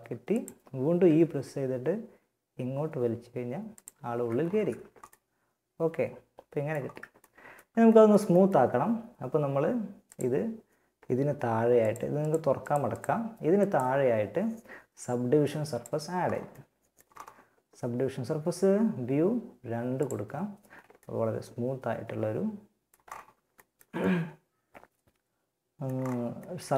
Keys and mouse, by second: 0.2 e, 3.4 z, 4.0 Tab, 4.5 middle click, 9.3-14.6 drag, 15.9-19.2 middle drag, 19.2 click, 19.8-20.8 middle drag, 21.4 middle click, 23.4-25.0 middle drag.